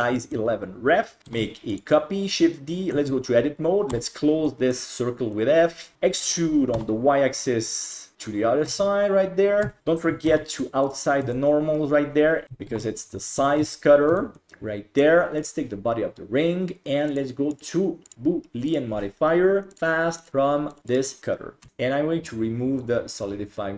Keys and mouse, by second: 1.3 shift+d, 2.9 Tab, 3.9 f, 4.5 middle click, 5.4 click, 5.9 e, 8.7 Tab, 9.7 Tab, 9.8 a, 10.3 alt+n, 11.2 Tab, 12.4 shift+t, 13.0 ctrl+s, 13.3 Tab, 13.6 alt+z, 14.1 Tab, 14.4-15.0 middle drag, 17.2 click, 18.1-18.8 drag, 20.2 click, 20.9 right click, 22.8 click.